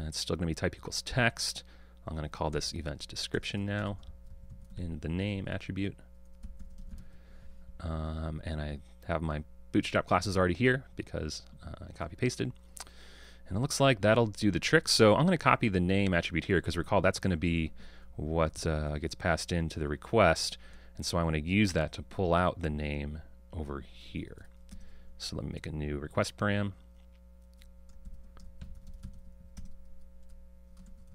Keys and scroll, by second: 18.6 super+c, 19.8 super+c, 29.7 Return, 30.8 Return.